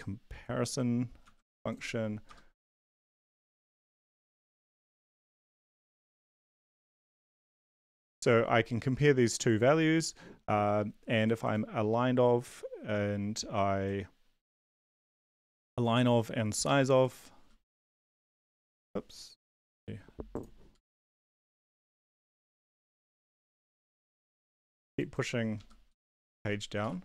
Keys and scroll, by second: 1.2 ctrl+c, 2.2 Return, 2.3-3.8 typing, 4.3 ctrl+Left, 4.4 ctrl+Left, 5.0 ctrl+Left, 5.0-6.4 typing, 6.5 End, 7.0 Left, 16.6 ctrl+c, 17.8 Down, 18.0 Page_Down, 18.6 End, 18.6 Up, 20.9 Up, 21.6 Down, 21.9 End, 22.2 Up, 22.4 End, 22.4 Page_Down, 23.0 Up, 23.4 Escape, 23.5 Up, 23.7 Up, 23.9 Up, 25.9 End, 26.2 Return, 26.6-27.0 typing.